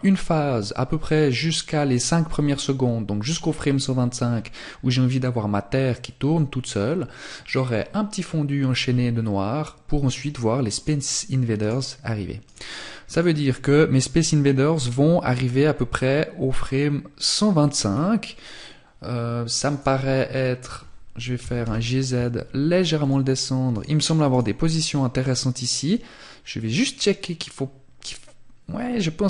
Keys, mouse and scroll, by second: 9.9 right click, 16.5-17.0 scroll up 1, 17.0-17.3 scroll down 1, 18.8 right click, 22.1 click, 22.8 right click, 24.2 right click, 24.9 click.